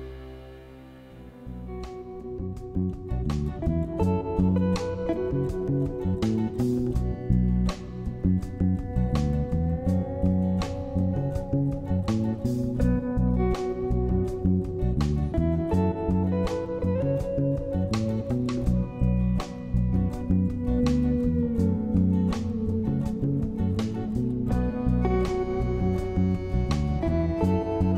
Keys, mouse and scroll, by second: 0.0 Delete, 2.2 s, 5.3 m, 11.1 m, 14.3 m.